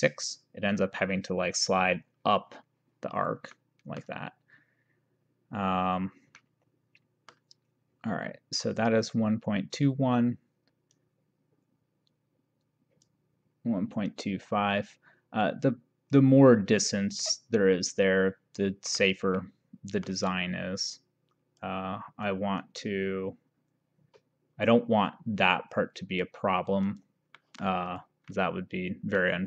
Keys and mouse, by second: 3.7 middle click, 6.5 middle click, 11.1 click, 14.1 click, 17.7 middle click, 19.4 middle click, 21.7 click, 26.9 click, 27.5 middle click, 29.3 middle click.